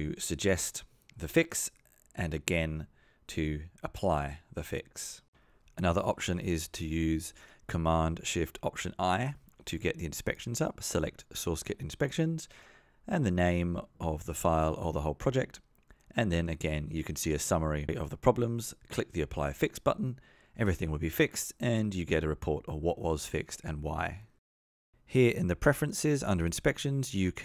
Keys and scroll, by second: 2.0 F2, 3.4 alt+Return, 6.4 super+z, 10.3 alt+shift+super+i.